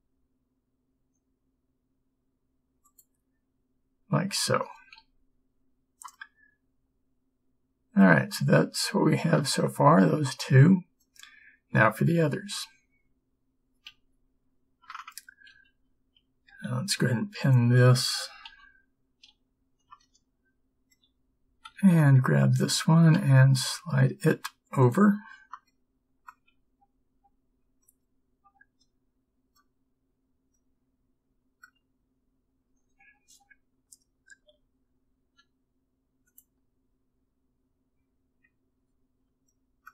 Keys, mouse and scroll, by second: 5.0 Tab, 9.3 middle click, 13.9 Tab, 15.6 a, 18.5 b, 18.5 p, 19.4 a, 23.3 g, 34.5 g.